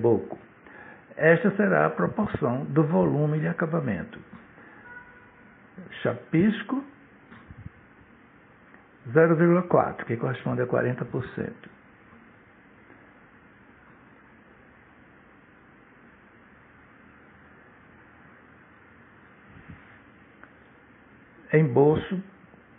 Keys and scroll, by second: 4.5-7.0 typing, 7.6 Right, 11.6 0, 12.3 ,, 13.4 4, 14.3 Return.